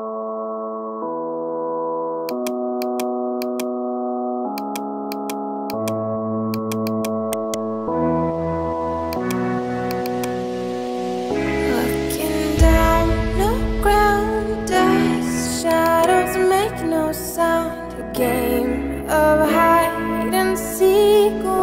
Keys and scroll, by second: 12.8-14.1 typing, 14.5 Return, 16.6-20.7 typing, 18.7 KP_Add.